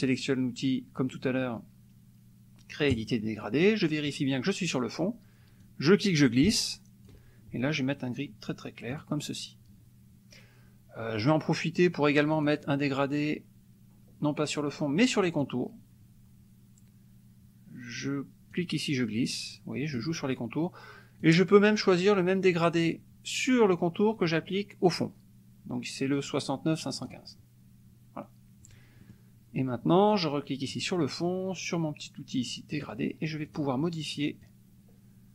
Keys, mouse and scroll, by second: 2.9 click, 5.6-7.2 drag, 8.9 click, 12.3 click, 15.4 click, 18.5-20.1 drag, 21.2-27.4 drag, 29.1 click, 30.7 click, 32.8 click, 33.5 click, 34.4-35.3 drag.